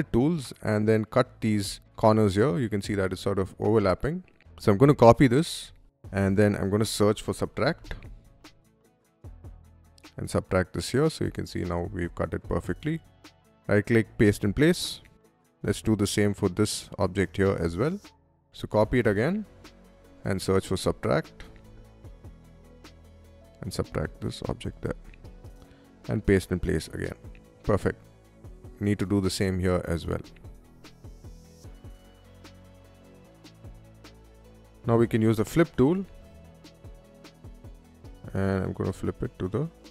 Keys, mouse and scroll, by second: 0.0-1.2 middle drag, 1.9 y, 2.2 middle click, 3.3 y, 4.5 click, 5.1 ctrl+c, 6.5-8.1 typing, 9.0 click, 9.9 click, 10.8-11.9 middle drag, 12.1 space, 13.9 click, 14.8 middle click, 15.7 shift+click, 16.4 shift+middle click, 17.6 shift+click, 18.2 ctrl+c, 18.8 middle click, 19.6 shift+s, 21.0-22.7 typing, 22.5 click, 23.5 click, 23.9 middle click, 24.5 space, 25.8 click, 26.6 middle click, 27.9 middle click, 29.9 ctrl+c, 30.5 middle click, 30.7-32.6 typing, 31.4 drag, 31.6 click, 32.1 click, 32.6 click, 32.7 Escape, 32.8 click, 33.7 click, 34.6 shift+s, 35.7-36.8 typing, 36.8 click, 37.2 middle drag, 38.0-39.8 drag.